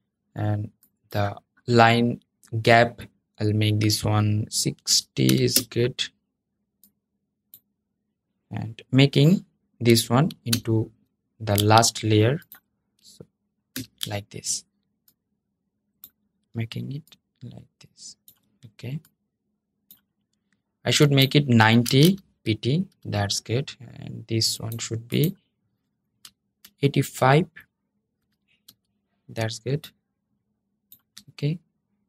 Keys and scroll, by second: 10.2 super+{, 13.4 super+{.